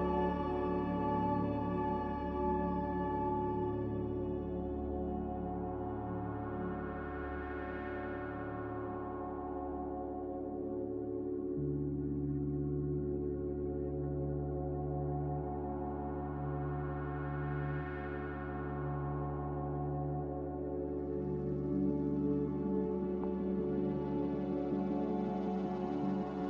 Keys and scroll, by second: 0.5 a, 13.1 ctrl+z.